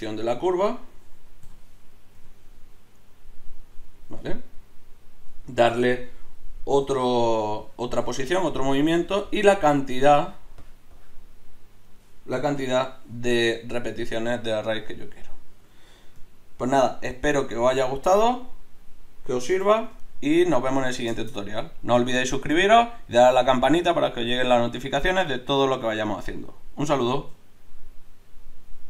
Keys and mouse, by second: 1.4 o, 2.1 g, 4.5-9.7 right drag, 6.8 g, 12.6 Tab, 16.7 alt+h, 19.7 a.